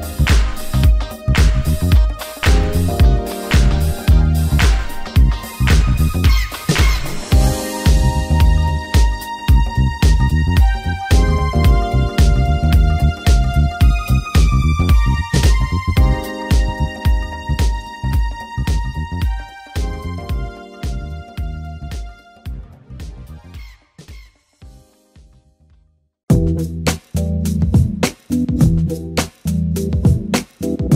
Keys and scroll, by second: 0.1 ctrl+d, 8.3 ctrl+d.